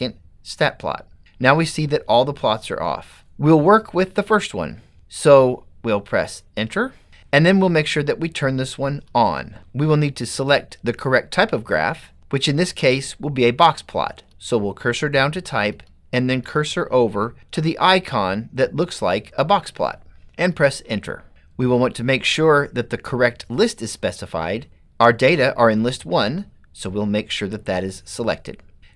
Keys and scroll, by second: 6.9 Return, 9.2 Return, 14.3 Down, 15.8 Right, 16.5 Right, 18.0 Right, 20.6 Return, 21.9 Down.